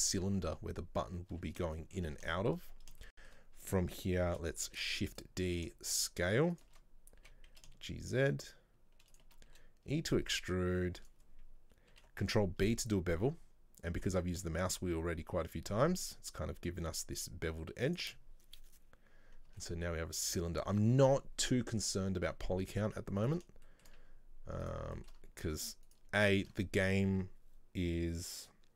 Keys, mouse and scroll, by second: 1.9 shift+middle click, 2.3 scroll up 2, 2.5 shift+middle click, 2.8-3.1 scroll up 1, 3.1-4.7 shift+middle drag, 4.7 shift+d, 5.6 s, 12.0 ctrl+b, 18.4 scroll down 1, 19.2-19.6 scroll down 1, 19.6 Tab, 19.7 middle click, 20.7-21.5 scroll up 2, 22.7 Tab, 23.3 alt+right click, 23.7 shift+middle click, 24.7 click, 25.0 shift+middle click, 25.3-25.9 scroll up 1, 25.9 alt+right click, 26.3 alt+shift+right click.